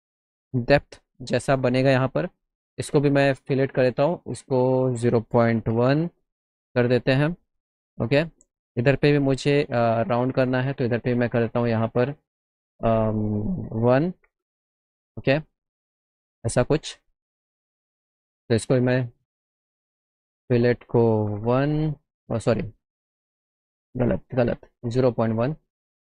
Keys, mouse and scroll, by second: 3.0 click, 4.8 click, 5.4 KP_0, 5.6 KP_Decimal, 5.8 KP_1, 6.0 KP_Enter, 8.3 click, 13.6 click, 14.3 Up, 15.8 click, 16.3 middle click, 17.3 middle click, 18.5 click, 20.5 click, 22.7 ctrl+z, 23.5 middle click, 24.0 ctrl+z, 25.5 click.